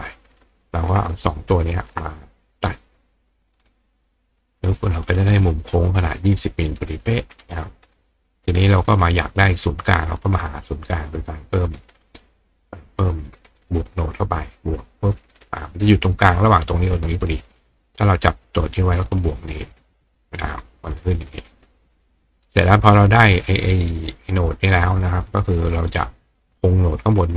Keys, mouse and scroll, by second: 1.1 shift+click, 1.7 shift+click, 3.9 click, 4.5 click, 7.7-8.7 drag, 8.8 click, 9.3-10.6 drag, 11.8-25.0 right drag, 13.3-13.6 drag, 14.8 click, 20.5 click, 24.6 click, 25.0-25.7 scroll down 1, 25.7 right click.